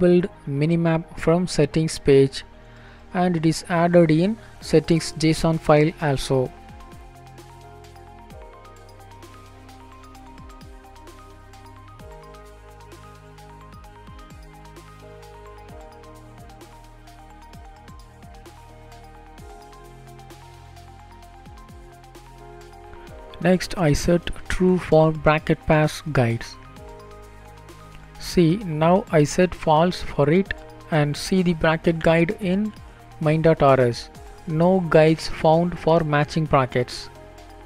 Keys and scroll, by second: 5.1 ctrl+s, 18.5 BackSpace.